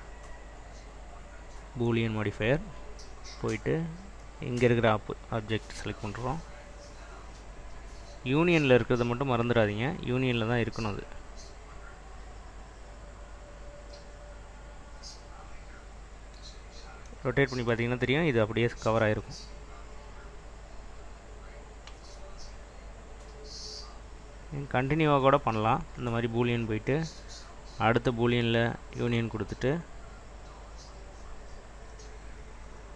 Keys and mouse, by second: 4.9 click, 21.5-26.8 drag, 32.1-32.9 drag.